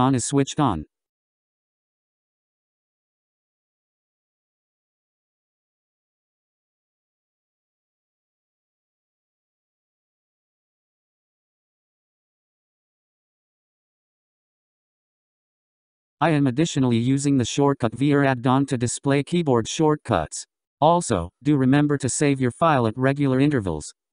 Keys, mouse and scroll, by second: 18.1 n, 23.2 n.